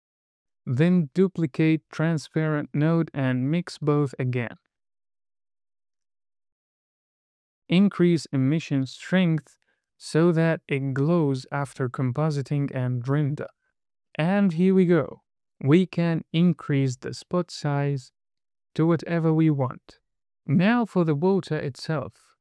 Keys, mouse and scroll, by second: 0.0 scroll up 3, 0.2 middle click, 0.9 scroll down 1, 1.0 middle click, 1.6 click, 2.0 shift+d, 2.3 click, 2.4 middle click, 3.0 click, 3.6 middle click, 3.8 drag, 5.2 click, 7.6-8.1 scroll up 2, 8.3-10.0 drag, 14.4 scroll down 1, 14.8 scroll up 1, 15.3 space, 16.3-17.6 drag, 18.6 space, 20.5 KP_1, 21.1-21.4 scroll up 3, 21.5 shift+middle click, 22.3 shift+a.